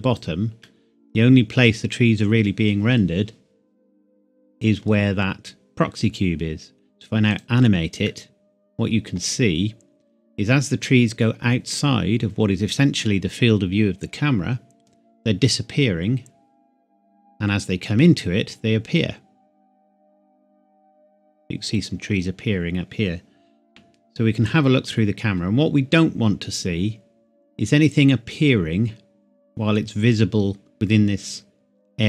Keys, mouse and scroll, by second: 0.7 middle click, 3.1-3.7 scroll up 1, 7.3 click, 8.1 middle click, 9.3 scroll down 1, 9.3-9.7 scroll up 1, 9.7-10.4 scroll down 1, 14.0-14.9 scroll up 1, 14.9-15.4 scroll down 1, 23.7 KP_0, 25.7 scroll up 1.